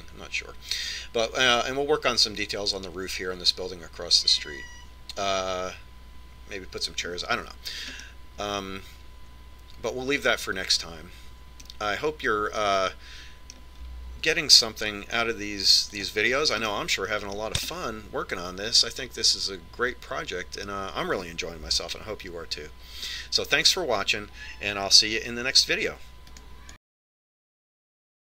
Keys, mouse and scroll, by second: 9.5-11.4 middle drag, 13.2-15.9 middle drag, 17.5 click, 18.2-21.0 middle drag, 21.1 middle click.